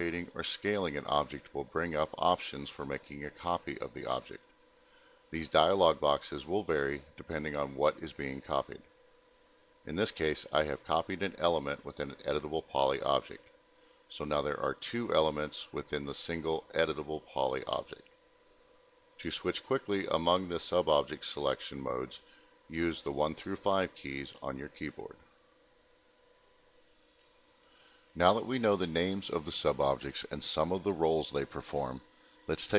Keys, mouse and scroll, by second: 1.0 shift+click, 2.1 shift+click, 6.7 click, 7.7 click, 7.7 alt+middle click, 8.8 alt+middle click, 10.0 middle click, 10.9 alt+middle click, 11.1 alt+middle click, 26.5 click, 27.1 alt+middle click, 28.0 ctrl+click, 28.4 middle click, 30.0 ctrl+click, 31.6 alt+middle click.